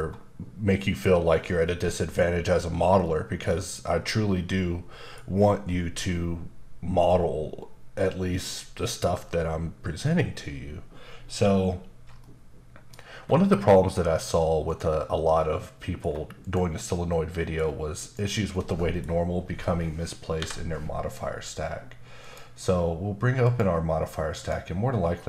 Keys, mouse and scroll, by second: 3.0 middle click, 12.2 middle click, 13.1-13.5 scroll down 2, 13.5 middle click, 14.6 click, 15.6 middle click, 16.4 click, 17.1 middle click, 18.0 click, 18.5 middle click, 19.1-20.3 scroll up 1, 20.3 n, 22.2 click, 23.4 click, 24.4 click.